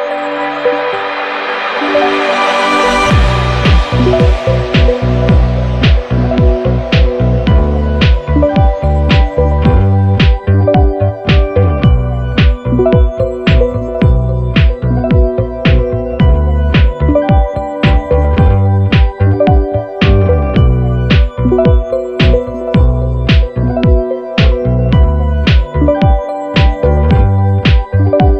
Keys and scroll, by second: 0.6 super+-, 5.4 super+c, 5.7 super+f, 6.1 shift+Down, 11.6 shift+Up, 12.0 shift+Down, 12.8 super+c, 13.0 super+f, 13.3 shift+Down, 15.0 super+c, 15.2 super+f, 15.7 shift+Down, 17.0 super+c, 17.2 super+f, 17.6 shift+Down.